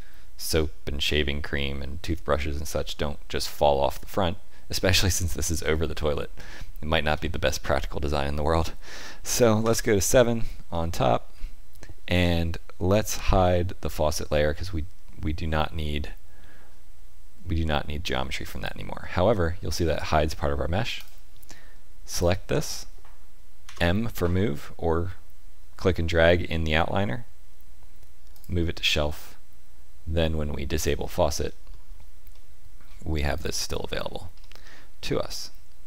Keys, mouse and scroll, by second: 3.8 middle click, 6.4 shift+middle click, 7.0 shift+middle click, 7.2 middle click, 9.5 KP_7, 10.6 shift+middle click, 15.7 middle click, 18.4 click, 20.9 click, 23.6 m, 30.7 click, 32.2 middle click, 33.3 click, 33.8-35.8 scroll down 3, 34.3 middle click.